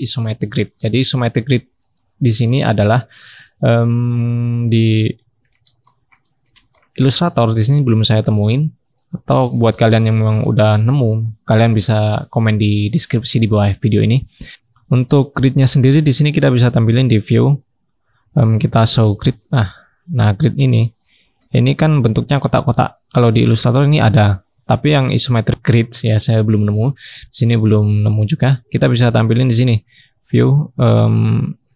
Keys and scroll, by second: 19.8 scroll down 1, 19.9-22.3 scroll up 1, 23.3-25.0 scroll up 1, 25.0-25.3 scroll down 1.